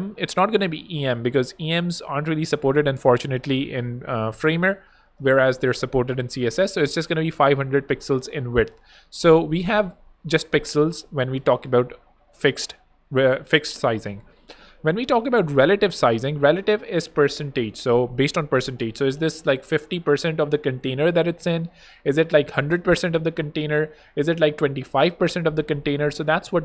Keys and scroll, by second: 4.4 Escape, 6.8-7.6 typing, 8.6 Return, 21.9-23.0 typing, 23.8 Return, 23.9 super+a, 24.2 super+2, 24.2 5, 24.7 shift+Return, 25.8 Return.